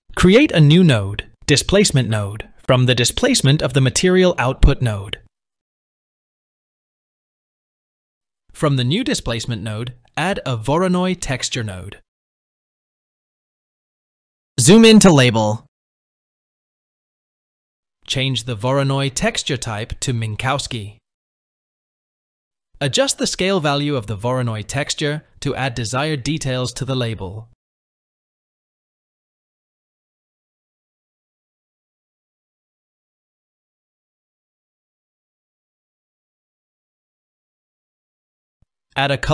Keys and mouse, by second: 2.9-8.8 drag, 9.9-13.4 drag, 16.5-17.2 shift+middle drag, 18.3 middle click, 19.3-22.9 drag, 25.3-28.0 drag, 29.8-31.2 drag, 32.1 click, 34.0 click, 37.6 shift+click.